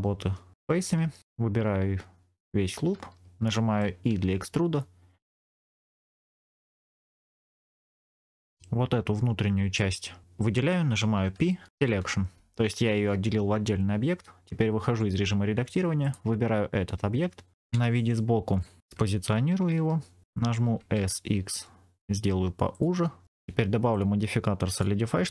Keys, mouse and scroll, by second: 0.5 3, 1.2 alt+click, 3.4 middle click, 4.0 e, 5.9 click, 7.0 scroll up 2, 7.2 shift+middle click, 7.6 middle click, 8.2 click, 9.7 middle click, 11.2 p, 14.8 Tab, 15.9-17.5 drag, 17.6 KP_1, 18.6 scroll up 2, 20.2 scroll down 3, 20.5 s, 20.9 x, 22.6 click, 23.1 scroll up 3, 23.8 click, 24.6-25.3 drag.